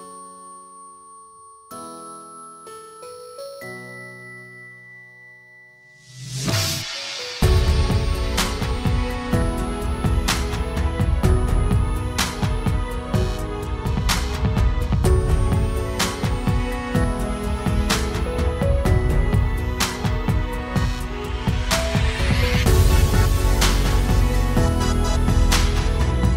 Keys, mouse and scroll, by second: 15.6 middle click, 16.3-17.7 drag, 25.8 shift+s.